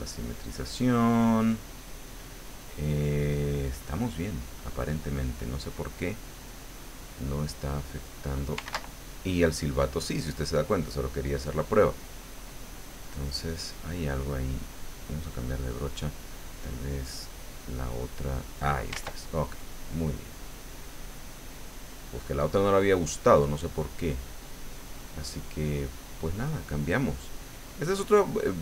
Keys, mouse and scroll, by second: 6.4 click, 7.7 click, 8.7 ctrl+z, 12.0-13.9 drag, 14.8 click, 15.2 click, 17.1 click, 17.8 click, 18.9 ctrl+z, 21.8-23.1 middle drag, 23.6-28.6 drag.